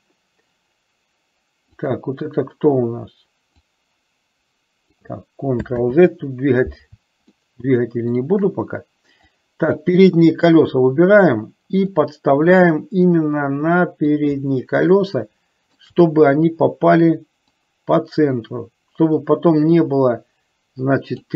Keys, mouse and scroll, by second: 3.7-5.2 drag, 6.0 ctrl+z, 7.5-8.5 shift+middle drag, 9.7-10.8 drag, 12.1-14.2 drag, 15.0-16.0 shift+middle drag, 17.7 click, 17.9-21.3 drag.